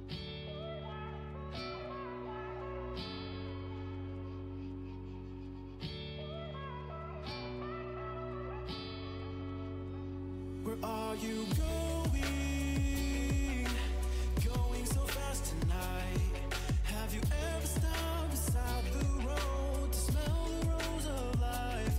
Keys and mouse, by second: 4.9-13.8 middle drag, 8.3-13.7 drag, 16.8-20.1 drag, 20.1-21.9 right drag, 21.0 click.